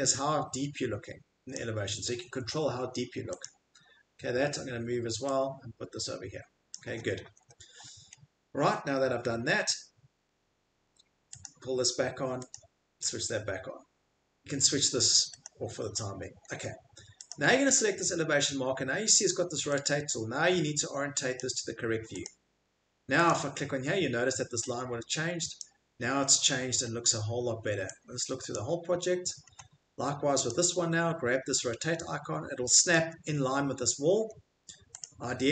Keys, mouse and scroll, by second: 1.5 click, 2.8 Escape, 3.4 click, 4.1 middle click, 4.1 middle click, 6.7 click, 6.7 middle click, 7.2 Escape, 7.7 middle click, 8.1 middle click, 10.1 middle click, 11.4 click, 11.4 middle click, 12.5 click, 12.5 scroll, 13.0 scroll, 15.5 click, 16.0-16.5 scroll, 17.3 click, 17.3 middle click, 21.4 click, 22.2 click, 23.2 click, 23.8 middle click, 23.9 middle click, 25.6 click, 25.6 middle click, 26.0 middle click, 26.0 middle click, 26.4 middle click, 26.9 middle click, 28.4 scroll, 28.6 click, 28.9 Escape, 29.1 middle click, 29.3-29.7 scroll, 30.5 scroll, 31.5 middle click, 32.9 click, 33.7 middle click, 33.8 middle click, 34.1 Escape, 34.6 scroll, 35.0 click, 35.4 scroll.